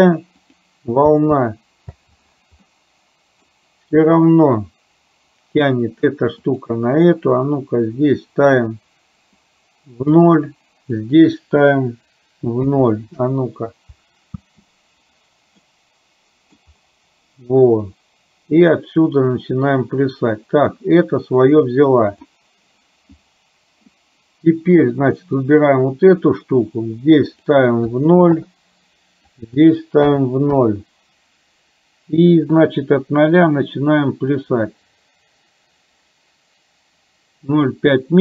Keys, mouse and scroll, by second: 1.1 space, 2.0 space, 2.7 middle click, 6.8 click, 9.5 click, 11.0-13.3 drag, 14.4 space, 15.6 middle click, 18.8-22.2 drag, 25.4 click, 27.4-28.5 drag, 29.5-30.6 drag, 32.7-38.2 drag.